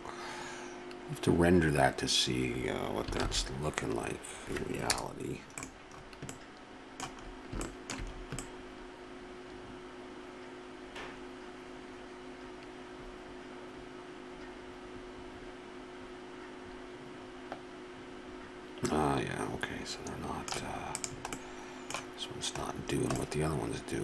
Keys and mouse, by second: 3.4 shift+z, 4.9 KP_0, 7.7 middle click, 8.6 middle click, 14.3 middle click, 16.8 middle click, 20.2 middle click, 20.9 right click, 21.4-22.8 middle drag, 23.2 middle click.